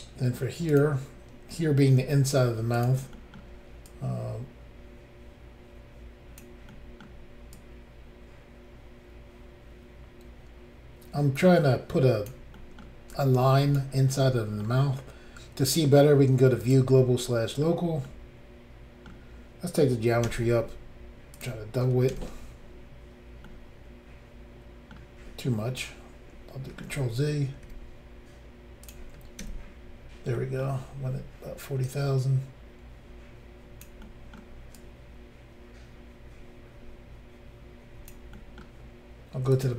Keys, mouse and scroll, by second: 0.7 click, 0.8 click, 2.0 f, 2.7 click, 3.1 middle click, 3.9 click, 6.7 middle click, 7.5 click, 12.5 middle click, 13.1 click, 14.2 middle click, 16.6 click, 16.7 click, 17.3 middle click, 18.1 middle click, 20.3 r, 21.4 click, 21.4 click, 22.1 ctrl+r, 23.5 middle click, 25.1-26.1 scroll up 1, 26.9 ctrl+z, 27.7 r, 28.8 click, 29.4 ctrl+r, 30.4 middle click, 31.8 click, 34.0 middle click, 34.8 click, 38.3 middle click, 39.5 click, 39.6 click.